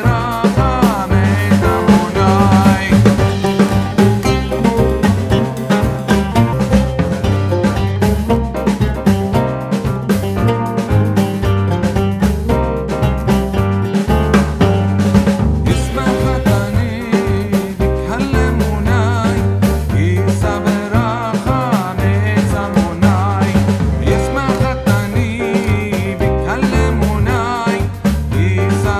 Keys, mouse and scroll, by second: 0.5 ctrl+f, 2.6-8.0 drag, 4.2 typing, 8.0 ctrl+z, 8.6-14.4 drag, 14.4 shift+a, 16.2-17.3 typing, 18.7 space, 19.1 shift+c, 21.9 click, 25.5-26.2 typing, 26.5 click, 27.2-28.5 typing.